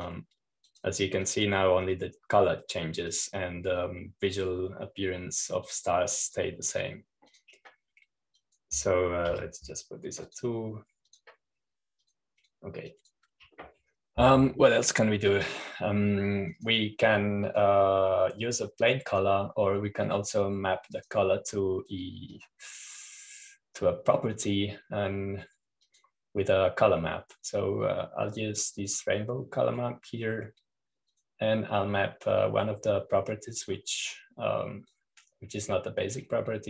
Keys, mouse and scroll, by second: 0.0 click, 1.8-3.2 drag, 5.0 click, 7.6-8.7 drag, 9.2 click, 10.2 click, 11.2 2, 12.1 click, 13.0 click, 13.9-15.9 drag, 18.5-20.0 drag, 20.5-21.9 drag, 22.8-25.6 drag, 27.8-29.0 drag, 30.7 click, 33.0-34.0 drag, 34.0-34.8 scroll down 2, 34.8-35.4 scroll down 1.